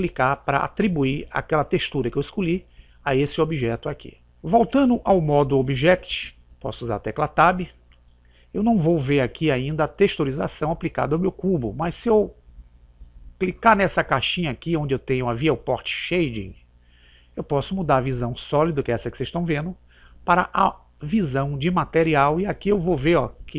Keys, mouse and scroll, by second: 5.6 click, 15.0 click.